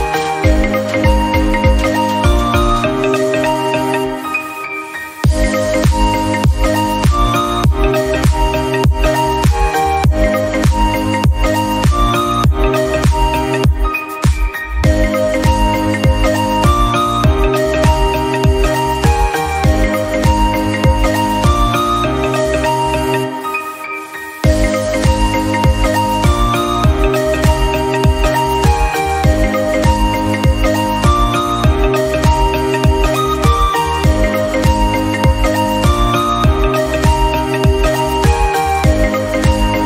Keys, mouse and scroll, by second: 3.4-5.0 scroll up 4, 3.6 middle drag, 5.5-6.9 drag, 6.9 scroll down 3, 7.1-7.8 middle drag, 7.8 scroll up 1, 7.9 shift+middle click, 8.4 Tab, 8.6-8.9 scroll up 1, 8.9 alt+z, 9.2 shift+middle click, 9.4 click, 9.6 shift+middle click, 9.9-11.0 scroll down 1, 11.0 click, 11.5 ctrl+a, 14.8 alt+z, 14.9 Tab, 15.1 scroll down 5, 15.3 shift+middle click, 15.4-16.9 scroll up 2, 15.7 click, 16.9 click, 17.3 scroll down 2, 17.6-18.1 middle drag, 18.1-18.7 scroll up 2, 18.7 KP_1, 19.6 Tab, 19.9 a, 20.1 a, 21.0 g, 22.1 Tab, 22.2 scroll down 3, 22.4 middle drag, 22.6 click, 22.7 scroll up 1, 22.9-23.7 middle drag, 23.7 click, 24.1 Tab, 24.4 KP_7, 25.0 a, 25.1 a, 25.4 click, 28.2 click, 28.4 Tab, 28.7 scroll down 1, 28.8-29.4 middle drag, 29.4 KP_1, 29.6 scroll up 1, 29.7 scroll down 2, 29.9 KP_7, 30.2 click, 30.4-30.9 scroll up 1, 30.9 g, 31.7 middle click, 32.3 click, 32.7 middle click, 32.9-33.2 scroll up 2, 33.2 KP_Decimal, 33.4 scroll down 2, 33.6 middle click, 34.1 s, 34.7 middle drag, 34.9-35.6 scroll up 1, 35.6 KP_Decimal, 36.2-37.5 shift+middle drag, 37.5 r.